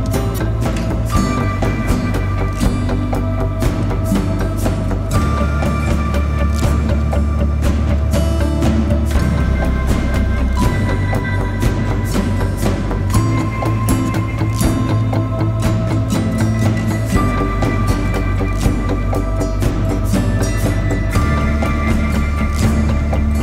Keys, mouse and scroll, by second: 0.3 click, 3.3 alt+click, 5.1 alt+click, 5.5-7.8 typing, 5.7 click, 6.5 click, 6.9 click, 11.3 right click, 12.0 click, 14.4 alt+click, 15.7 right click, 16.4 click, 16.8 right click, 18.5 click, 19.4 alt+click, 20.3 right click, 21.0 click.